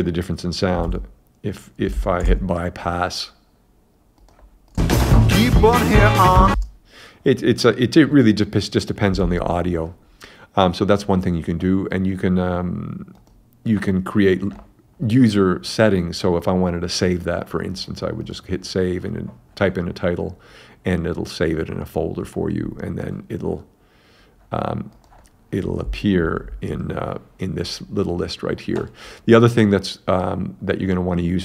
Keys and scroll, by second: 0.9 super+Tab, 2.3 super+`, 4.8 space, 6.6 space, 9.3 super+`.